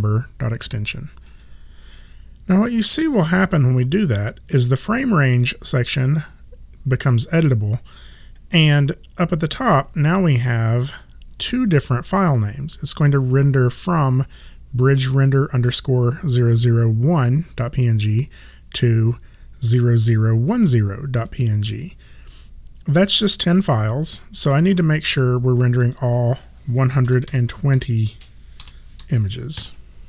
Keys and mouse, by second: 1.2 click, 25.8 click, 27.0 KP_2, 27.3 KP_0, 28.6 BackSpace, 29.6 Return.